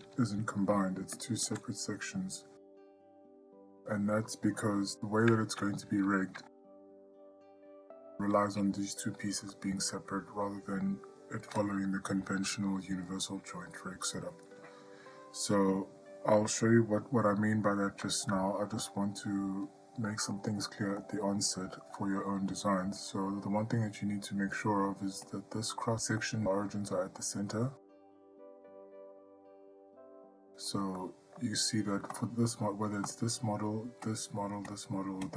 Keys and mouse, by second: 0.3 g, 3.3-4.8 middle drag, 9.7-10.2 middle drag, 11.0-11.7 ctrl+middle drag, 18.3-19.0 ctrl+middle drag, 21.2-21.7 middle drag, 26.4 click, 27.4-28.3 ctrl+middle drag, 30.6 middle drag, 31.2-31.6 ctrl+middle drag, 32.4 click, 33.3 click, 34.9 click.